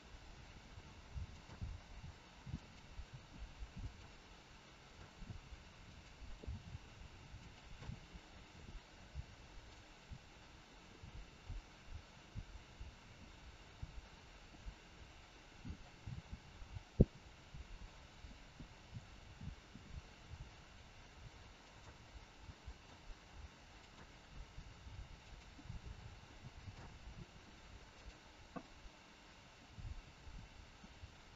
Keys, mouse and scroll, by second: 0.1 g, 1.8 g, 3.1 r, 4.9 click, 5.8 click, 6.4 r, 8.3 middle click, 11.4 middle click, 14.4 click, 14.9 middle click, 18.8 click, 20.2 g, 21.9 middle click, 23.8 click, 24.4 g, 25.7 middle click, 28.1 click, 28.7 middle click.